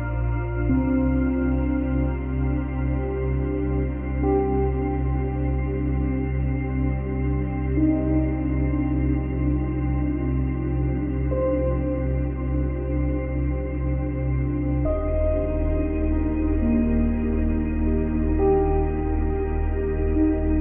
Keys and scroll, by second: 1.4 space, 13.2 F9.